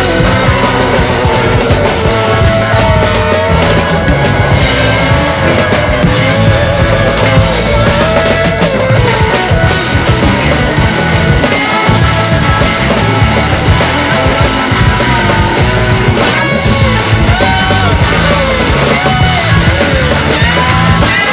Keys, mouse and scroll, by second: 0.2 click, 1.3 click, 1.5-1.9 scroll up 6, 1.9-2.3 scroll down 3, 2.3-3.6 drag, 4.7-6.2 drag, 7.0-8.0 drag, 8.7-9.8 drag, 10.8 click, 11.9-14.5 drag, 14.5 scroll down 4, 15.0 ctrl+s, 15.6-16.5 drag, 16.5 scroll down 1.